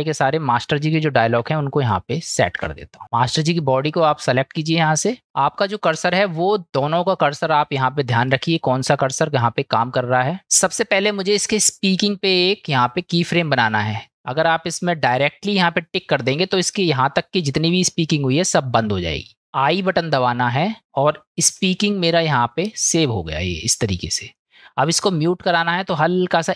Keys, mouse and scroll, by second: 1.0-1.4 shift+middle drag, 1.9-2.6 middle drag, 2.8 shift+middle drag, 2.9 shift+click, 3.1 click, 5.2 middle click, 5.9 middle click, 8.3 middle click, 13.9 middle click, 25.2-26.4 drag.